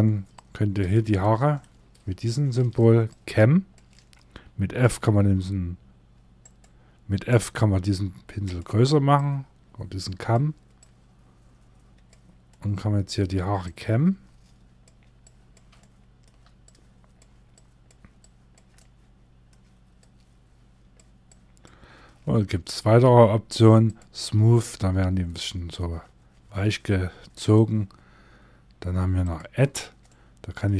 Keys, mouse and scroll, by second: 4.2 f, 6.8 f, 8.6 click, 12.0 middle click, 13.1 click, 15.3 shift+middle click, 16.2 click, 18.2 middle click, 19.5 click, 29.5 middle click, 30.5 scroll down 1, 30.6 middle click.